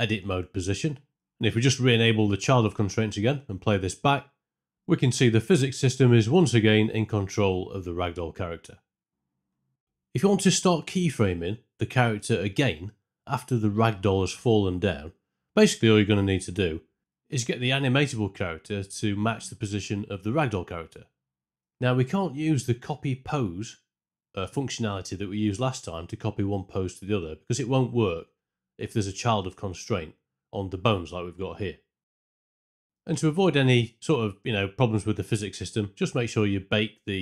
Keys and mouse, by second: 2.3 alt+click, 3.6 space, 5.9 space, 9.9 shift+Left, 9.9 space, 16.3 space, 20.5 space, 22.8 ctrl+space, 24.8-26.0 drag, 33.6 Tab, 34.6 a, 35.6-37.2 drag.